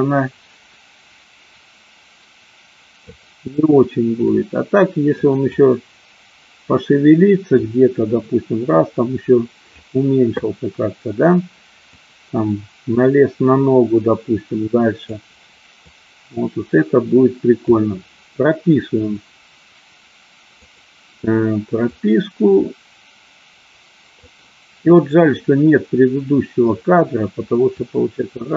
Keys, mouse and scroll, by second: 4.4 click, 5.7-6.9 drag, 7.8-9.8 drag, 11.9-15.3 drag, 16.0-17.8 drag, 20.7 click, 21.9-24.6 drag, 27.9-28.5 drag.